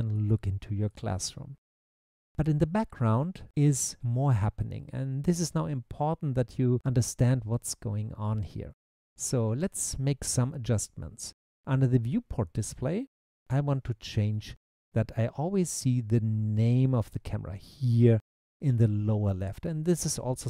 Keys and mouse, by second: 0.2 click, 0.9 click, 9.7 click, 13.2 click.